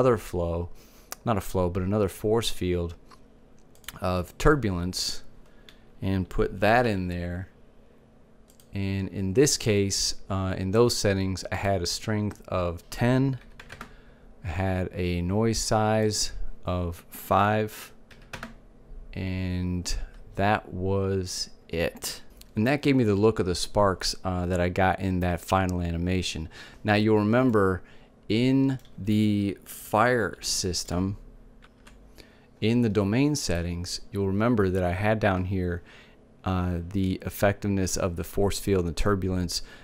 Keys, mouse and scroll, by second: 6.5 g, 8.3-10.2 drag, 11.2-13.1 drag, 15.7-17.6 drag, 27.1-28.8 middle drag, 30.0-31.1 middle drag, 32.9-38.0 drag.